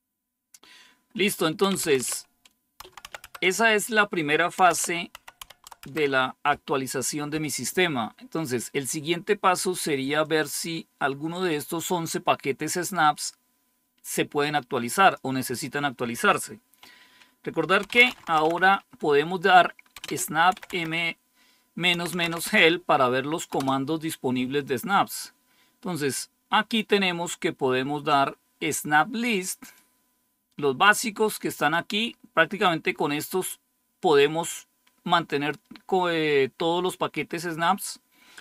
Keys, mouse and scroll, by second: 1.3-6.1 typing, 10.1-11.4 drag, 11.8 click, 14.8 click, 17.5-18.8 typing, 19.9-24.1 typing, 29.6-31.6 drag, 31.9 click.